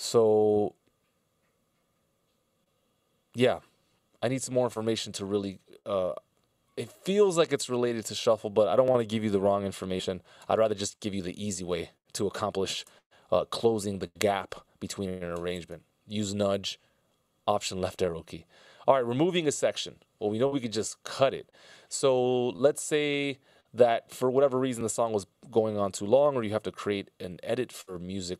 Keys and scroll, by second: 10.1 F16, 10.2 Delete, 11.4 alt+Left, 25.3 c.